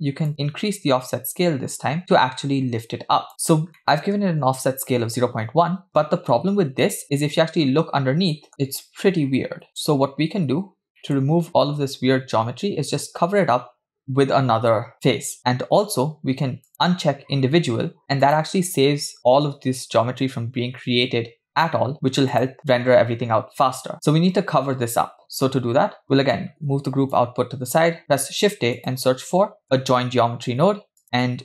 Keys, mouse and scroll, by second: 0.3-3.3 drag, 3.7 scroll up 3, 3.8 middle click, 6.3-7.0 scroll up 1, 7.0 scroll up 2, 7.0 scroll down 2, 7.2-9.7 middle drag, 9.7-10.3 scroll down 1, 10.4-10.9 scroll down 1, 11.0 middle click, 14.0-14.5 scroll down 1, 16.7 click, 18.3 click, 22.4 click, 25.7-26.3 scroll down 4, 26.0 middle click, 26.4 click, 27.5 scroll down 1, 28.0 shift+a, 31.0 click.